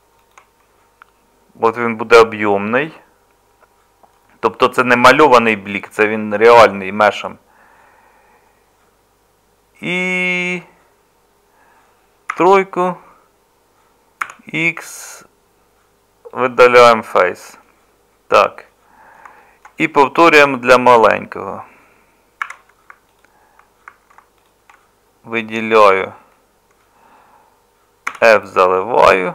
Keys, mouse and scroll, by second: 12.3 3, 14.2 x, 20.4 1, 22.4 2, 28.1 f.